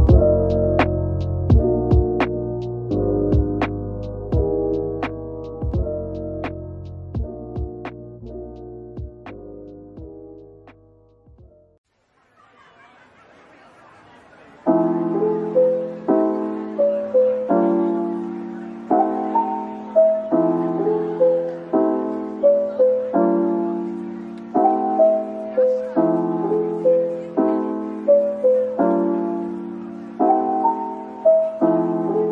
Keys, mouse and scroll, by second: 0.5 ctrl+j, 1.4 shift+click, 2.0 shift+click, 3.4 ctrl+l, 6.1-6.6 scroll down 1, 6.6 scroll down 1, 6.8 ctrl+z, 8.5 ctrl+l, 14.3-15.0 scroll down 1, 15.8 shift+click, 16.0 typing, 18.0-18.5 typing, 20.4-20.8 typing, 22.9-24.6 typing.